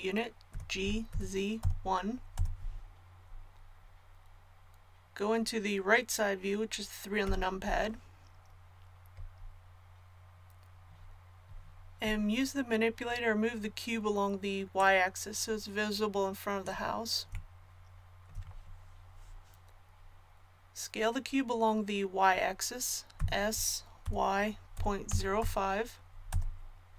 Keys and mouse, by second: 0.5 g, 7.2 KP_3, 14.7-16.6 drag, 23.1 s.